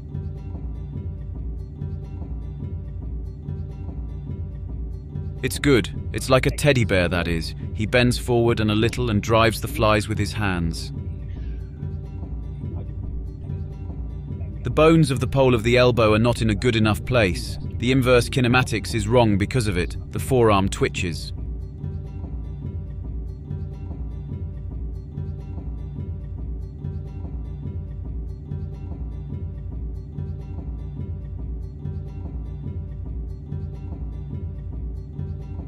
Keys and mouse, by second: 0.3 a, 0.6 click, 0.7 ctrl+c, 0.8 click, 0.9 ctrl+shift+v, 1.1-24.9 drag, 25.8-27.9 drag, 28.3 a, 28.6 i, 28.9 i, 29.1 drag, 29.2 ctrl+c, 29.3 ctrl+shift+v, 29.4 click, 29.7-32.4 drag, 32.9 click, 33.2 click, 33.9 click, 34.1 click, 34.4 click, 34.6 ctrl+c, 34.8 ctrl+shift+v, 34.9 click.